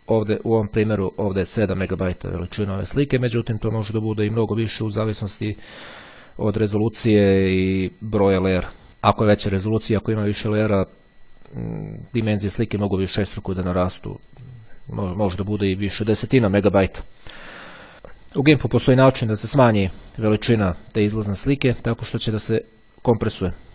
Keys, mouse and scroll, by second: 0.1-2.5 drag, 3.5 click, 5.0 click, 21.5 click, 23.1 click.